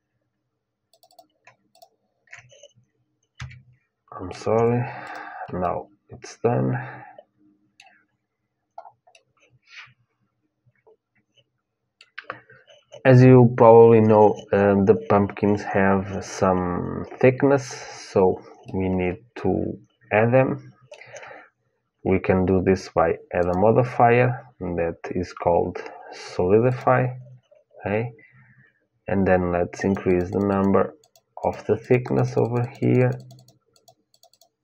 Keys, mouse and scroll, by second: 3.1 f, 4.3 Tab, 4.8-6.8 drag, 5.3-6.5 middle drag, 6.8 middle click, 7.7-10.8 middle drag, 18.4-20.6 middle drag, 23.1-26.4 drag, 29.5-34.6 drag.